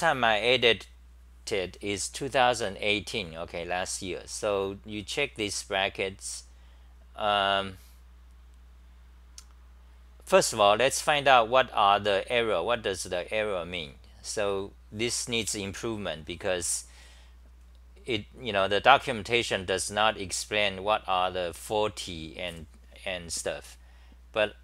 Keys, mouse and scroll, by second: 5.9-8.1 scroll down 15, 8.4-9.6 scroll down 3, 9.6-10.1 scroll down 1, 10.1-12.8 scroll down 4, 13.9-16.8 scroll down 9.